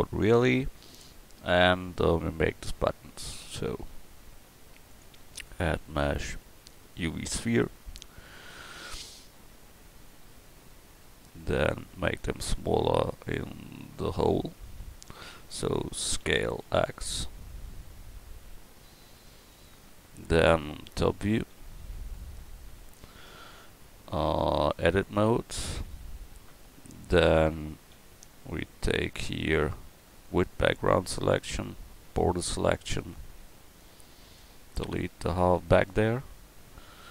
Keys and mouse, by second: 8.5 s, 16.2 s, 21.8 KP_7, 23.3 Tab, 28.0 a, 31.5 b, 34.8 x, 36.6 Tab.